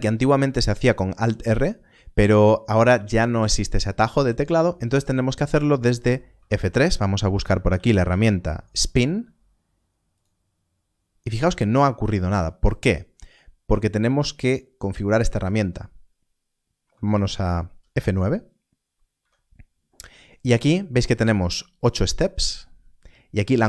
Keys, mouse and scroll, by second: 6.2 click, 7.4 F3, 7.4 s, 7.6 p, 8.0 n, 10.1 n, 10.1 click, 19.1 F9.